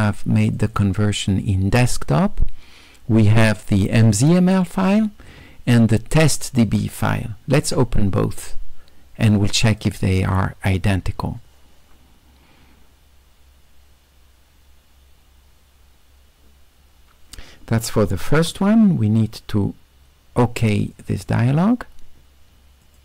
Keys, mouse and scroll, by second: 0.6 click, 0.8 click, 4.1 click, 6.2 ctrl+click, 9.7 click, 18.4 q, 21.0 click, 22.9 click.